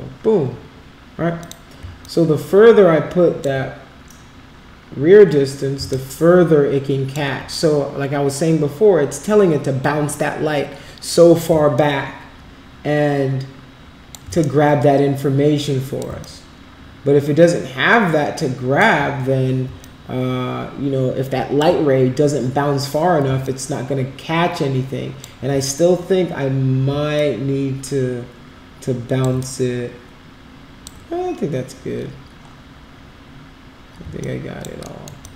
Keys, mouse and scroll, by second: 1.4 click, 2.0-3.4 alt+drag, 5.9-7.1 alt+drag, 11.7-14.1 alt+drag, 14.4-16.0 shift+right drag, 16.2-18.7 alt+drag, 19.8-21.5 alt+drag, 23.4-25.2 alt+drag, 27.1-29.2 alt+drag, 29.4-30.8 shift+right drag, 34.2 alt+click, 34.8 alt+middle click, 35.2 alt+click.